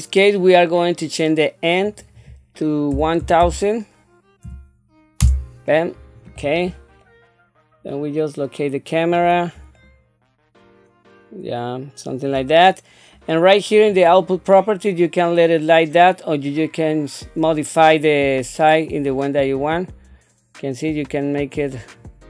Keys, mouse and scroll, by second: 1.8-5.3 drag, 13.8 click, 19.5-22.2 drag.